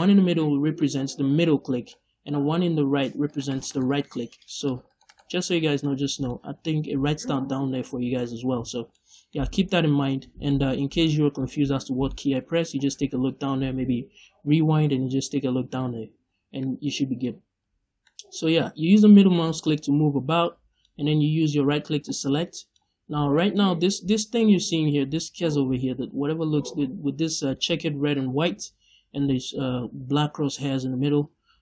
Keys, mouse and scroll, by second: 0.7-3.1 middle drag, 3.1 right click, 4.2 click, 4.5 click, 4.8 right click, 5.5 scroll up 1, 5.5 scroll down 1, 5.7 middle click, 16.1 scroll up 1, 16.5-17.9 middle drag, 17.6-17.9 scroll down 2, 18.5-22.3 middle drag.